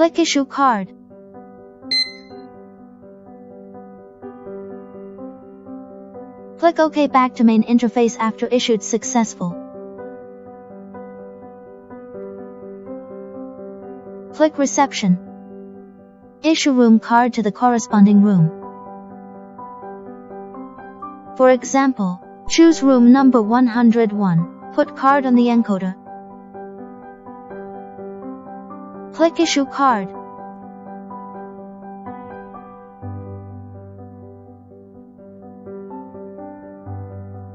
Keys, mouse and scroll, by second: 1.0 click, 3.2 click, 6.2 click, 9.7 click, 13.1 click, 15.5 click, 24.3 click, 30.9 click, 34.0 click, 37.3 click.